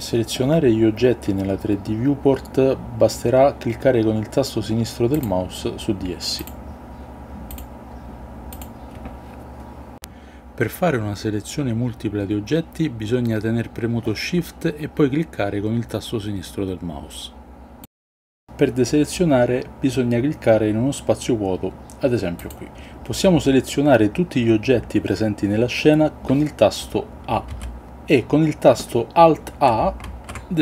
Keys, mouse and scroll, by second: 6.5 drag, 7.6-14.0 drag, 15.5 shift+click, 16.4-17.4 shift+drag, 27.6 a, 30.1 alt+a.